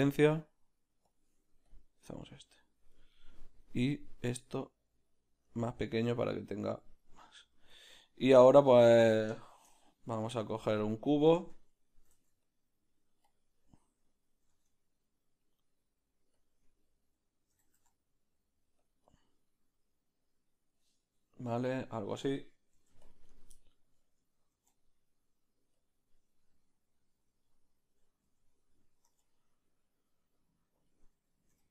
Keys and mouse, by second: 2.3-4.6 middle drag, 4.6-7.2 drag, 7.2-31.6 middle drag, 10.7 shift+a, 11.5 Tab, 12.1 s, 14.5 s, 22.7 ctrl+r, 24.5 ctrl+b, 28.0 ctrl+b, 28.3 ctrl+z, 29.1 ctrl+b, 31.1 ctrl+b, 31.6 3.